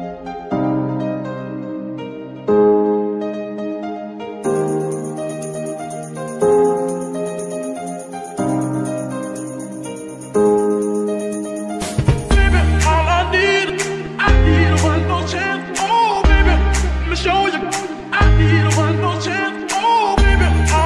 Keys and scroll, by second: 1.6 shift+g, 1.8 shift+y, 7.0 shift+n, 11.0 F2, 11.8-14.4 typing, 15.0 Return, 19.4 shift+g, 20.0 Escape.